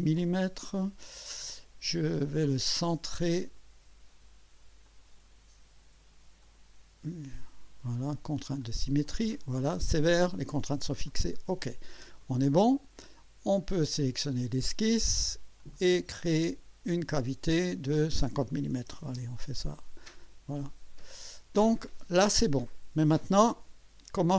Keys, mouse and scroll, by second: 0.0-0.3 typing, 3.4 click, 4.9 click, 6.4 click, 8.6 click, 11.1 click, 12.2-12.9 drag, 15.6 click, 17.7 click, 18.8 KP_5, 18.9 KP_0, 19.1 KP_Enter, 20.0-21.6 drag, 23.0-24.3 drag.